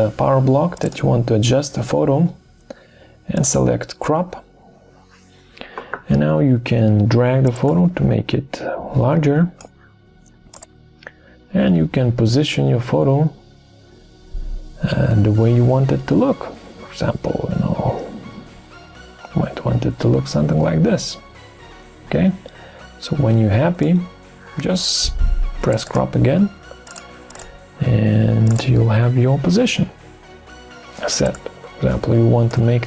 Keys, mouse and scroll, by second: 7.7 shift+click, 31.3 shift+click.